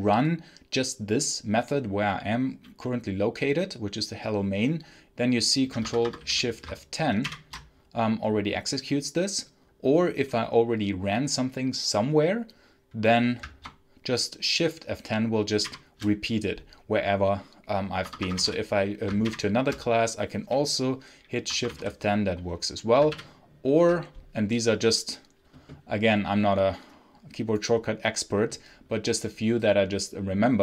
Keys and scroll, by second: 5.7 Escape, 5.8-6.6 typing, 7.1 ctrl+shift+F10, 15.5 shift+F10, 17.9 Escape, 18.2 space, 18.3 l, 19.1 shift+F10, 21.4 Escape, 21.6 space, 21.6 h, 21.8 space, 23.0 ctrl+F8.